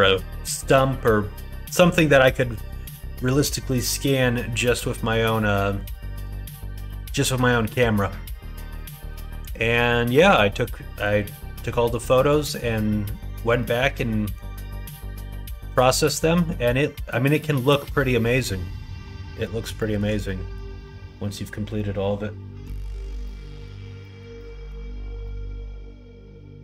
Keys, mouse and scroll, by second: 5.8 scroll up 1, 5.9 middle click, 7.1 middle click, 8.7 scroll up 1, 8.7 middle click, 9.4 scroll up 1, 9.5-11.0 middle drag, 12.1 middle click, 13.5 middle click, 14.8-16.4 middle drag, 17.4 scroll up 1, 17.4-19.6 middle drag, 19.7 shift+middle click, 20.2-21.2 middle drag, 23.2 scroll up 1, 23.2 middle click, 23.6 scroll down 1, 23.9 scroll up 1, 24.0 middle click, 24.1 scroll down 1, 24.3 middle click, 25.3-26.6 middle drag.